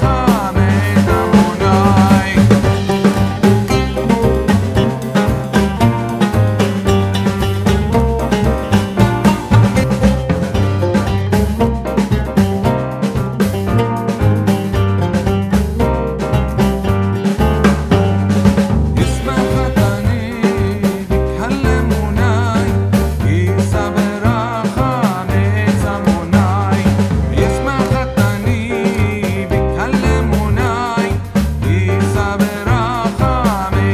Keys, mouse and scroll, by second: 0.9 click, 1.3-2.5 typing, 3.1 click, 4.4 click, 11.5 ctrl+g, 11.8-13.5 drag, 26.3-31.4 drag.